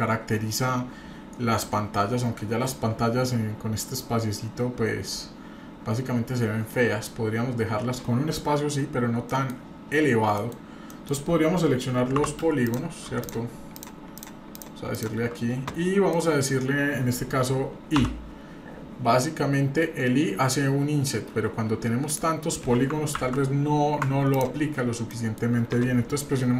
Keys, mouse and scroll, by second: 9.3 middle click, 9.7-10.3 scroll up 2, 10.4 middle click, 10.5-10.9 scroll down 2, 10.9 middle click, 12.2 3, 12.6 click, 13.2 shift+click, 13.7-15.1 shift+drag, 16.1 middle click, 18.0 i, 24.3 shift+click, 25.1 middle click.